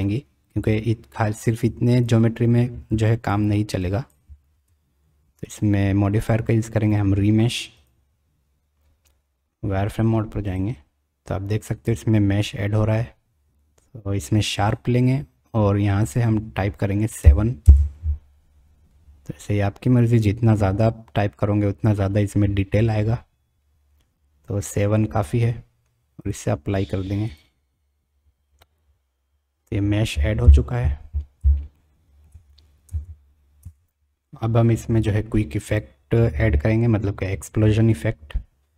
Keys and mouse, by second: 1.6 click, 2.9-3.3 drag, 3.9 click, 4.5 Tab, 5.5-7.9 drag, 10.5 click, 14.6 click, 16.2-18.5 drag, 26.2-27.6 drag, 30.4 KP_1, 31.8-32.3 shift+drag, 33.0 Tab, 33.6 Tab.